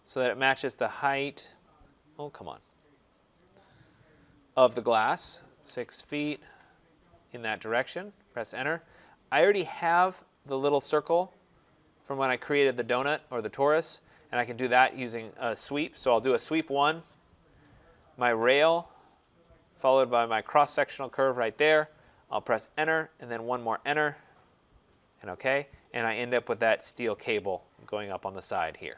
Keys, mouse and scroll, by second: 0.5 click, 1.1 Escape, 1.5-2.5 scroll, 2.7 right click, 3.4 click, 3.7 scroll, 5.5-6.0 typing, 6.9 click, 7.2 scroll, 8.2 Return, 8.9-10.0 scroll, 10.1 middle click, 11.1 click, 12.2 click, 12.3-13.2 scroll, 15.1 Escape, 15.9-17.3 typing, 19.1 click, 20.7 click, 22.3 Return, 23.3 Return, 25.1 click, 25.8-27.3 scroll, 27.7-28.3 scroll.